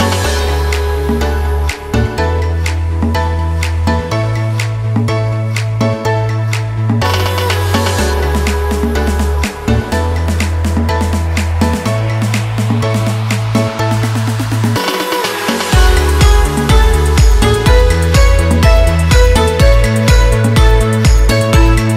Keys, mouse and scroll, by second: 3.7 ctrl+a, 5.3-6.7 typing, 7.7-15.7 drag, 15.7 ctrl+t, 16.6-21.5 drag, 21.5 Return.